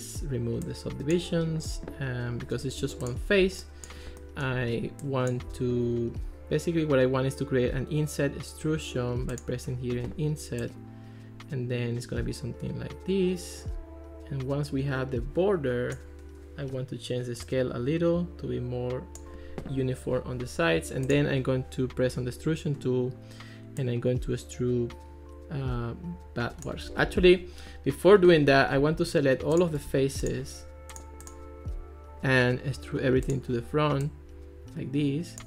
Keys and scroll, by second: 27.1 super+z, 28.8 super+a.